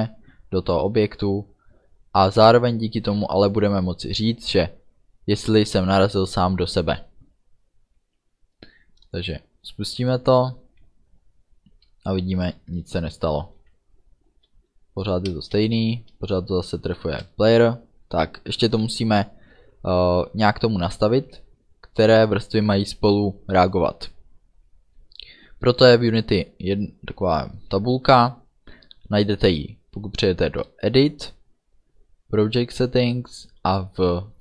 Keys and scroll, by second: 12.4 space.